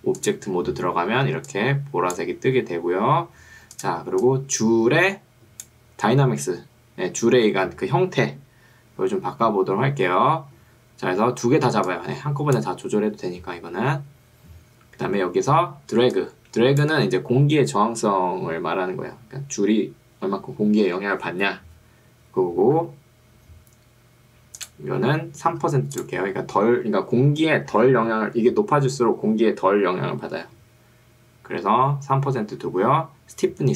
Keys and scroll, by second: 1.3 ctrl+2, 2.7 Escape, 16.1 ctrl+2, 16.9 Escape, 25.7 3.